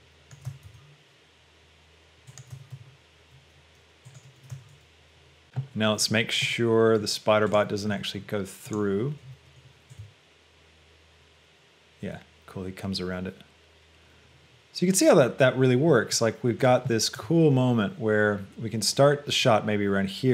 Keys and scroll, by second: 4.6 r.